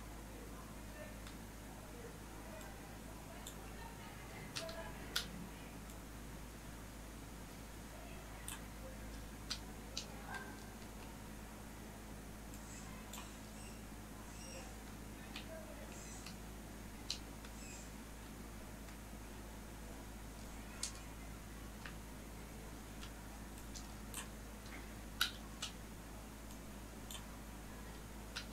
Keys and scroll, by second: 2.6 ctrl+z, 20.0 ], 23.5 ctrl+alt+z.